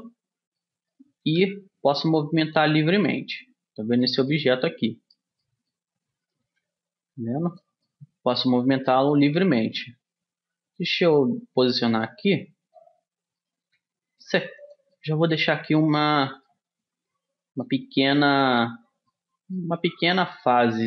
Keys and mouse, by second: 1.1-3.0 drag, 1.4 g, 3.2-4.9 middle drag, 6.4 right click, 6.6 g, 6.8-8.4 drag, 9.9 g, 13.6 middle click, 13.8 g, 14.6 click, 17.6-20.8 middle drag.